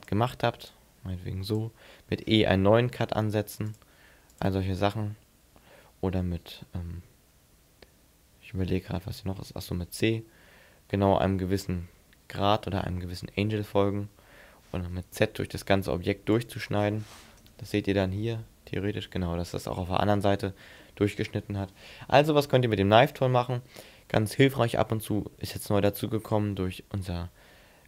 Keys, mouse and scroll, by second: 18.0 middle click, 20.9 middle click, 23.6 ctrl+z.